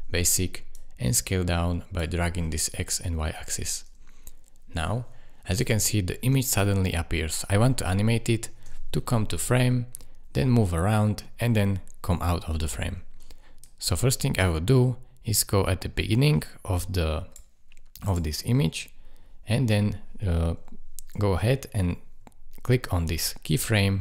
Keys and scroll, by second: 6.3 space, 8.5 space.